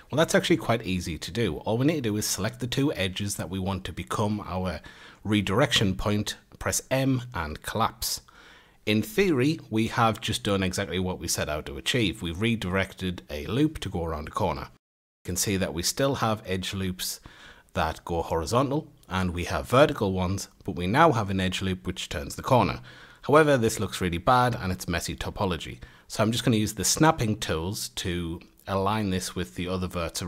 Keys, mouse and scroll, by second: 0.8 click, 1.4 shift+click, 5.5 m, 9.4 2, 13.3 3, 16.5 alt+shift+click, 17.7 a, 18.9 alt+shift+click, 19.8 a, 20.7 alt+shift+click, 21.6 a, 22.6 1, 23.3 click, 23.6-24.7 scroll up 3, 24.7 g, 27.5 g, 29.2-29.6 scroll, 29.6 a, 30.1-30.2 scroll down 1.